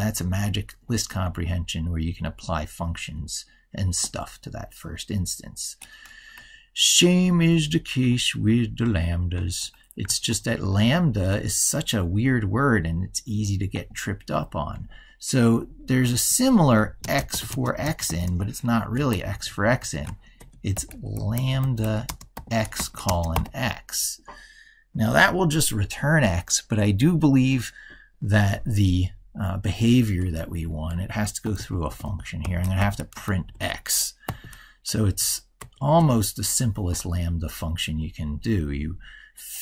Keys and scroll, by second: 9.9 ctrl+shift+Left, 18.9 ctrl+shift+Left, 30.3 ctrl+Left, 33.2 ctrl+Right.